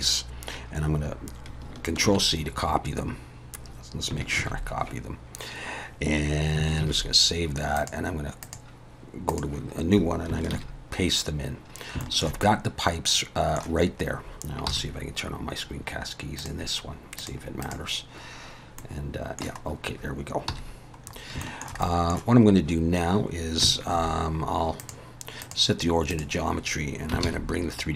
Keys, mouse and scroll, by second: 2.0 ctrl+c, 2.2 ctrl+x, 4.3 ctrl+c, 6.8 ctrl+s, 7.8 click, 18.8 middle click, 19.6-20.5 scroll up 1, 20.5 n, 21.1 scroll up 3, 21.4 shift+middle click, 21.8 middle click, 24.8 click, 27.2 shift+s.